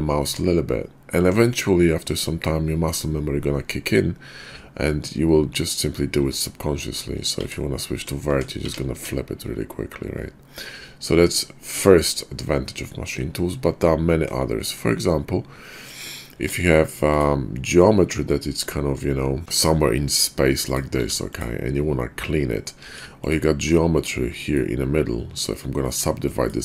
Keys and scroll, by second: 0.2 Tab, 1.1 Tab, 4.3 Tab, 8.0 Tab, 8.3 Tab, 8.7 Tab, 9.0 Tab, 16.3 Tab, 19.4 e, 21.0 e, 22.8 Tab.